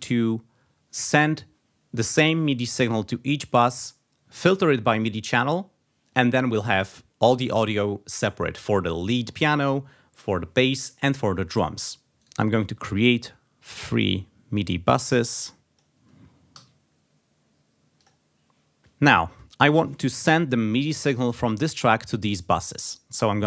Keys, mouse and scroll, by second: 12.1 click, 12.2 right click, 13.9 click, 14.5 click, 15.4 click, 16.5 3, 18.0 click, 19.3 click.